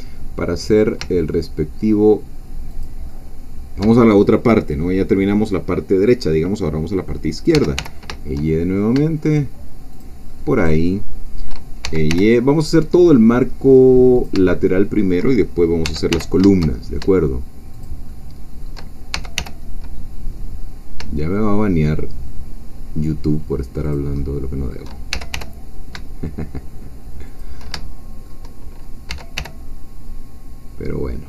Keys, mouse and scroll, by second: 2.7 shift+click, 3.1 shift+middle click, 7.5 e, 7.8 y, 9.9 shift+click, 10.3-11.5 shift+middle drag, 11.9 shift+e, 12.1 shift+y, 14.1 shift+click, 14.5 shift+middle click, 15.8 e, 16.1 y, 17.7 shift+click, 18.1-19.1 shift+middle drag, 19.1 shift+e, 19.4 shift+y, 23.8 shift+click, 24.2 shift+middle click, 25.1 shift+e, 25.3 shift+y, 27.3 shift+click, 27.8 shift+middle click, 29.1 e, 29.3 y.